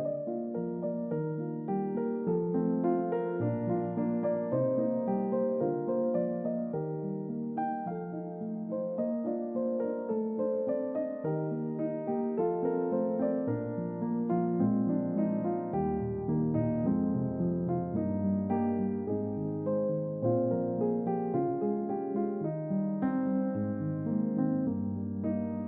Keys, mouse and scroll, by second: 0.9 right click, 2.9 click, 3.4 double click, 3.8-5.0 middle drag, 5.3 shift+middle click, 6.1 middle click, 7.9 alt+click, 9.1 click, 9.7 alt+click, 11.2 click, 11.7 alt+click, 13.4 alt+click, 14.9 right click, 17.3 click, 17.9 click, 18.6-21.8 middle drag, 22.4 click, 24.1 click, 25.4 click.